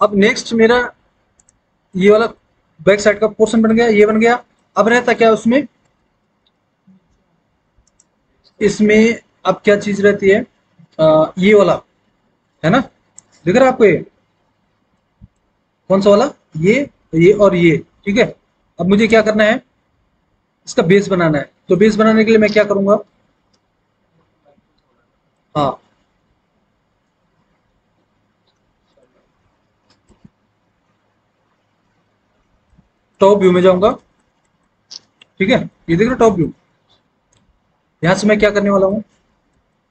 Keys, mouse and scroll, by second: 9.9-10.2 scroll up 1, 11.1-13.8 scroll up 1, 33.2 alt+w, 33.8 alt+w.